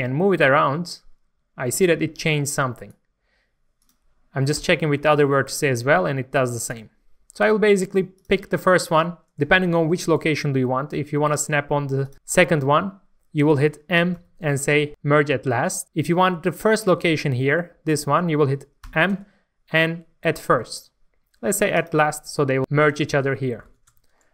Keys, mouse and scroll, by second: 2.7 right click, 3.8 click, 4.6 g, 6.6 right click, 8.1 click, 8.5-10.6 scroll up 1, 12.0 shift+click, 14.1 m, 17.0 middle click, 18.9 m, 21.8 click, 23.6 alt+a, 23.9 Tab, 24.1-24.3 scroll down 1.